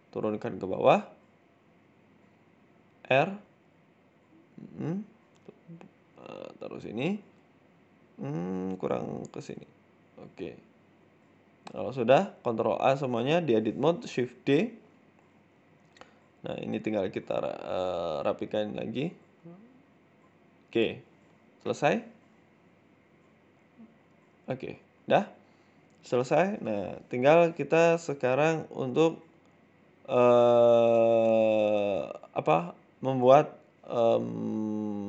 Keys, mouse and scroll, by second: 0.0 shift+middle click, 0.4 g, 2.2 middle click, 3.0 r, 4.3 middle click, 4.8 g, 5.4 middle click, 5.9 r, 6.5 middle click, 6.8 scroll down 3, 7.0 middle click, 7.4-7.7 scroll up 3, 7.8 KP_7, 8.6 t, 9.2 t, 9.2 r, 10.3 middle click, 11.0 KP_7, 11.7 Tab, 12.1 a, 12.4 shift+d, 13.3 r, 14.3 shift+middle click, 14.6-15.0 scroll up 2, 15.0 g, 16.0 middle click, 16.4 middle click, 17.1 KP_7, 18.1 r, 18.6 middle click, 19.8 middle click, 20.0 Tab, 20.1 scroll down 6, 20.2 middle click, 20.9 scroll up 2, 21.0 Tab, 21.5 KP_1, 22.3 r, 23.2 g, 24.2 Tab, 24.2-24.8 scroll down 6, 24.3 middle click, 24.8 middle click, 25.1-25.7 scroll up 6, 25.7 scroll down 1, 25.7-26.3 scroll down 2, 26.3 scroll down 1, 26.7-27.2 scroll up 2, 27.2 scroll down 1, 27.8 right click, 29.1 middle click, 29.8-30.2 scroll down 3, 30.2 middle click, 30.8 c, 33.6 g, 34.8 h.